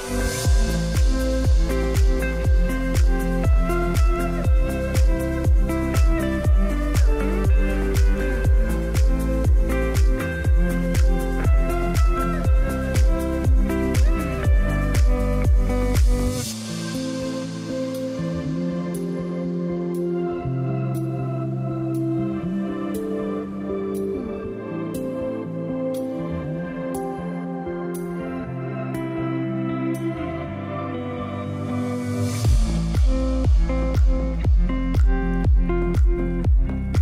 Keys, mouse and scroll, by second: 0.6 click, 1.2-2.0 scroll down 1, 2.0 click, 4.5 click, 8.6-11.8 drag, 16.6-18.1 click.